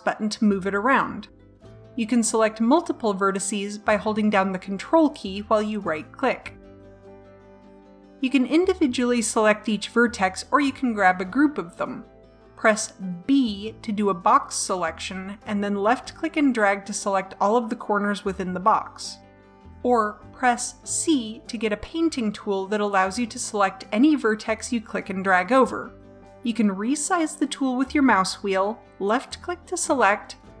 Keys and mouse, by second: 5.3-7.1 drag, 7.7-9.3 drag, 9.4 a, 13.2 b, 19.5 a, 21.0 c.